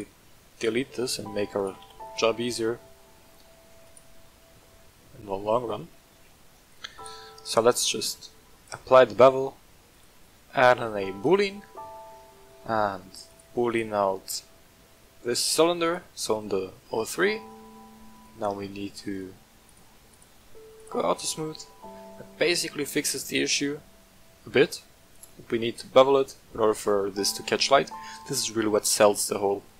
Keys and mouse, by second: 0.5 right click, 1.0-1.3 shift+drag, 1.5 shift+click, 1.8 x, 3.8 click, 4.5 shift+middle drag, 6.9 right click, 8.7-9.2 drag, 10.0-11.3 drag, 13.3 click, 14.1 click, 19.6 click, 20.8-21.4 drag, 23.9-24.4 middle drag, 26.1 click, 26.7 right click.